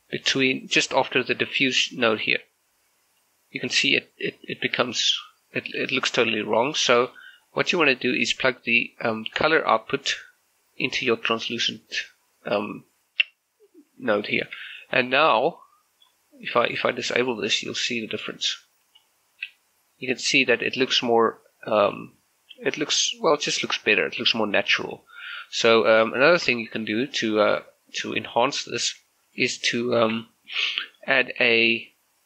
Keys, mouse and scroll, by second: 0.0 g, 0.5-5.9 drag, 2.6 click, 6.4 click, 6.6-8.8 shift+middle drag, 8.8-15.1 drag, 15.1-16.8 middle drag, 17.6 click, 18.1-19.5 middle drag, 21.9 m, 24.4 m, 25.0 m, 26.2 shift+middle click, 27.2 click, 29.1 g, 29.3 click, 30.0 shift+a.